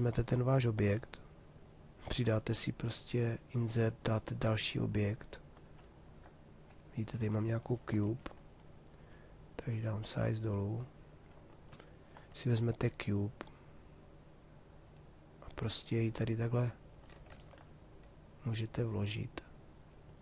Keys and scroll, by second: 7.1 3, 16.9 ctrl+z.